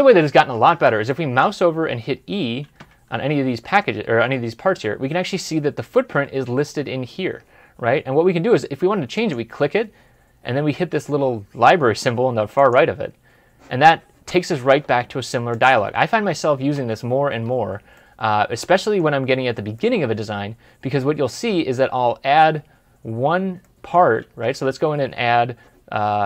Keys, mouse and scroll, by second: 2.5-3.3 typing, 16.5 Escape, 17.9 middle click, 20.4 scroll down 1, 21.0 middle click, 21.3 scroll up 1, 21.8-22.2 scroll down 1, 22.4 scroll up 1, 23.5 middle click.